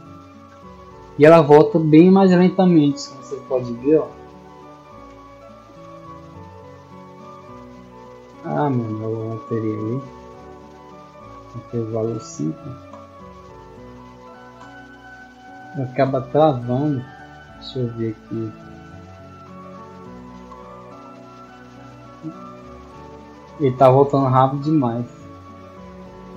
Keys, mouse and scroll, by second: 3.3 d, 10.1 click, 13.3-16.3 typing, 17.7 click, 20.6-23.4 typing, 26.1 click.